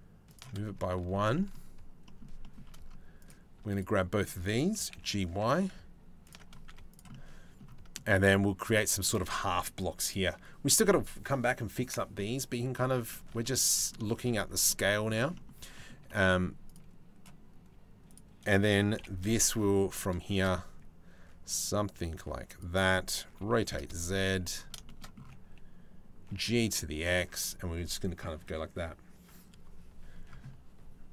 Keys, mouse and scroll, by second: 0.6 shift+middle click, 1.7 shift+middle click, 2.1 shift+middle click, 2.8 click, 3.3 shift+right click, 4.4 g, 6.3 z, 6.8 click, 7.6 middle click, 11.8 middle click, 12.7 shift+middle click, 13.1 middle click, 13.7 shift+middle click, 14.3 middle click, 15.0 middle click, 15.4 shift+middle click, 16.3 middle click, 17.4 shift+middle click, 18.6 KP_7, 19.8 shift+middle click, 20.0 shift+d, 23.0 r, 24.5 shift+middle click, 25.9 g.